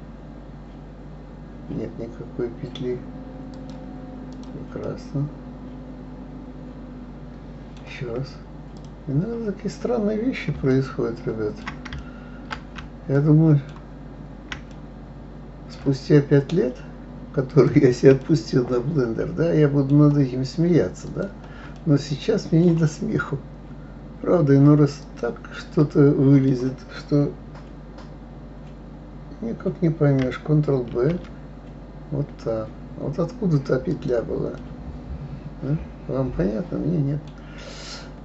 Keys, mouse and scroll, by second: 4.3 click, 4.9-7.8 middle drag, 8.8 click, 10.7-17.5 shift+middle drag, 17.5 shift+click, 18.2-21.1 middle drag, 21.1 shift+click, 21.7-24.8 middle drag, 25.0 shift+click, 25.8-28.8 middle drag, 30.9 ctrl+b, 34.6-37.5 middle drag, 37.5-38.2 scroll down 2.